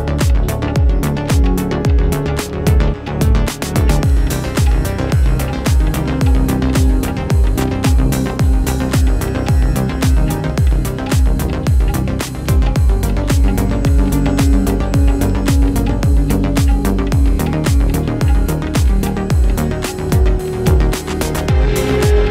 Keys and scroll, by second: 0.8 shift+Return.